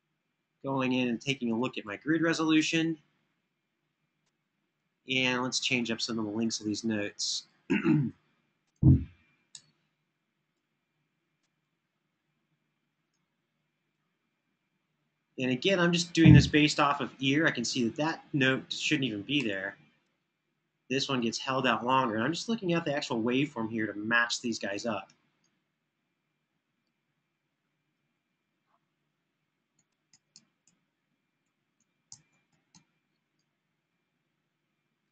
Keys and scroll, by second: 4.0 Escape, 4.4 Escape, 4.8 Escape, 5.2 Escape, 9.3 BackSpace, 19.0 BackSpace, 27.9 super+[, 29.6 Escape, 29.8 Escape, 30.1 Home, 30.5 Home, 31.2 Home, 31.5 Home, 35.0 space.